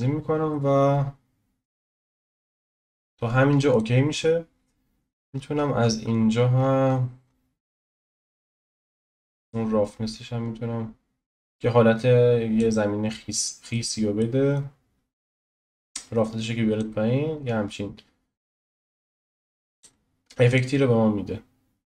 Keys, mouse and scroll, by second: 1.0 click, 1.0-3.8 scroll down 2, 12.5-14.5 drag, 13.1 scroll up 1, 13.7 middle click, 14.5-16.8 middle drag, 16.8-20.5 drag, 21.0-21.7 scroll down 1, 21.7 scroll up 1.